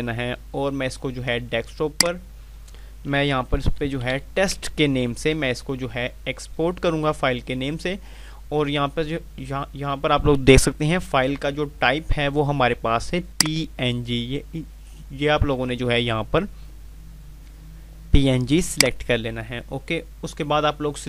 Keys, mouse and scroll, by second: 0.4 click, 3.3-4.6 typing, 13.2 click, 18.6 click.